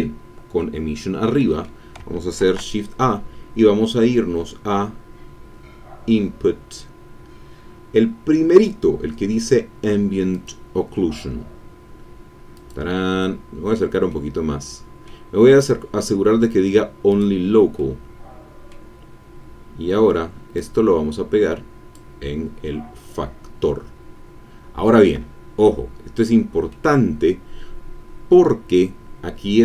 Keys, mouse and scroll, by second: 1.2 click, 2.4 shift+a, 10.5 click, 12.5 click, 13.3-13.9 scroll up 2, 14.1-15.2 drag, 17.1 click, 17.7-18.9 middle drag, 19.4-19.7 scroll down 2, 20.7-22.1 drag, 26.7-28.8 middle drag.